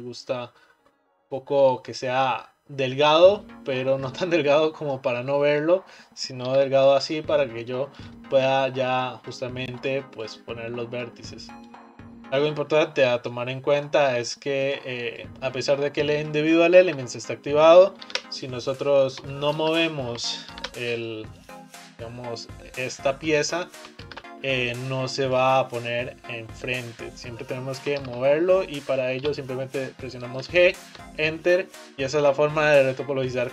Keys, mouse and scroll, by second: 5.1-6.5 middle drag, 6.5 ctrl+r, 7.6 middle click, 8.1 click, 8.5 click, 9.8 click, 10.3 click, 11.7 click, 13.4-14.7 middle drag, 14.7 click, 15.2 click, 16.9 ctrl+z, 18.1 ctrl+r, 19.7 ctrl+z, 20.6 ctrl+r, 22.0 click, 24.1 ctrl+z, 24.9 click, 28.0 ctrl+z, 29.2 g, 33.3 click.